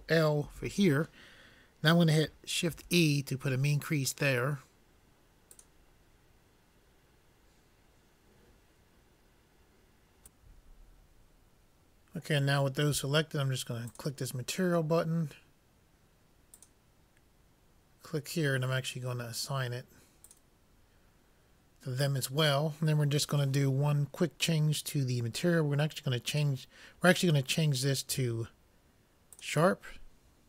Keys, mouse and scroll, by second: 0.4 ctrl+l, 2.8 shift+e, 14.0-15.7 drag, 16.7-20.9 drag, 21.1 click, 26.8-28.2 drag.